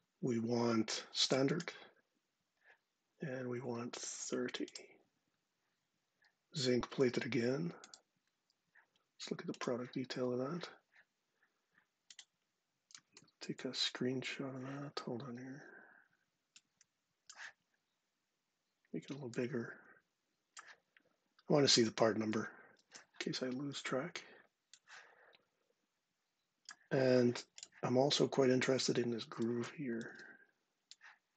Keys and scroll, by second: 22.5 shift+super+4, 29.8 shift+super+4.